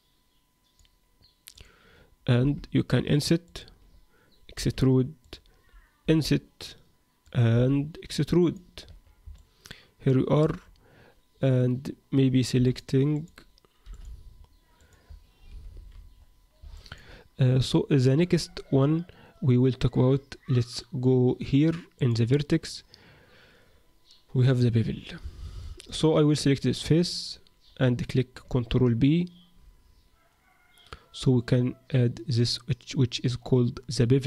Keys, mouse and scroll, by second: 1.5 click, 2.4 i, 4.5 e, 6.1 i, 7.5 e, 8.7-9.2 scroll down 6, 8.9 Tab, 9.3 middle click, 10.6-11.9 scroll down 2, 11.9-12.3 scroll down 1, 12.5 x, 13.1 click, 13.8 x, 14.8 click, 15.5 alt+r, 15.7 alt+g, 16.1-16.7 scroll up 4, 16.7 shift+middle click, 18.7 Tab, 21.9 click, 25.6 middle click, 26.9 click, 27.6-28.4 scroll up 1, 28.4 ctrl+b, 28.4-28.9 scroll up 2.